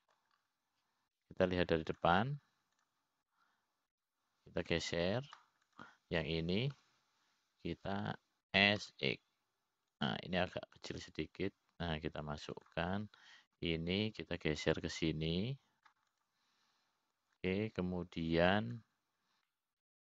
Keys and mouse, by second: 0.5 e, 2.2 middle click, 5.3 click, 6.5 l, 7.3 click, 8.2 click, 9.3 l, 11.0 s, 13.4-15.0 drag, 15.2 click, 16.3 l, 17.0-18.5 drag, 18.6 click.